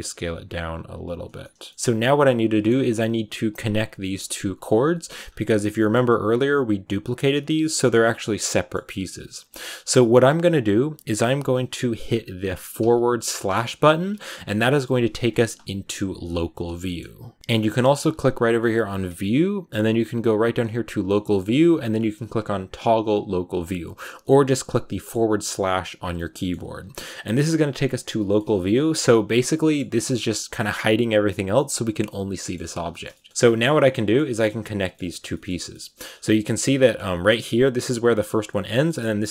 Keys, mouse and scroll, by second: 0.0 g, 1.0 right click, 1.1 scroll down 4, 1.3-5.1 shift+middle drag, 5.1-5.5 scroll down 1, 5.5-7.8 middle drag, 7.8-8.3 scroll down 1, 8.3-12.7 middle drag, 12.7 /, 13.3 /, 14.0 /, 16.7-23.5 middle drag, 24.1 middle click, 24.9 /, 25.3 /, 26.0-27.4 middle drag, 27.4 scroll down 3, 27.6-35.8 middle drag, 35.8-36.3 scroll up 3, 36.3 Tab, 36.4 middle click, 36.5 scroll down 2, 36.7 middle click, 37.4 right click, 37.8 g, 38.6 scroll up 1, 38.7 middle click, 39.1 shift+right click, 39.2 scroll down 1.